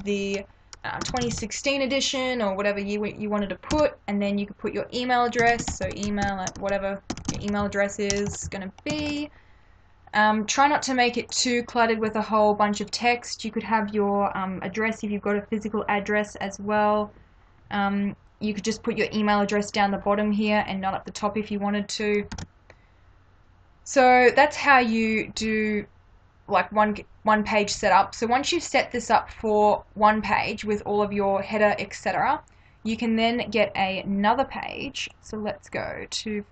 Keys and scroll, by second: 1.0 2, 1.1 0, 1.2 1, 1.4 6, 3.7 Return, 5.4-9.1 typing, 22.4 ctrl+-.